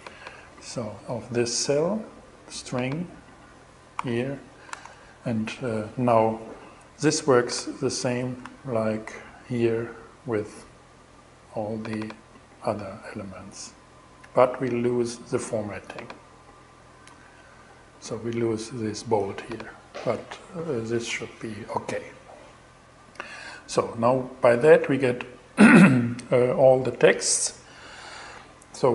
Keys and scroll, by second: 3.4 alt+6, 4.1 alt+shift+6, 4.2 alt+shift+Return, 4.7 shift+Return, 8.0 shift+Return, 16.8 shift+super+e.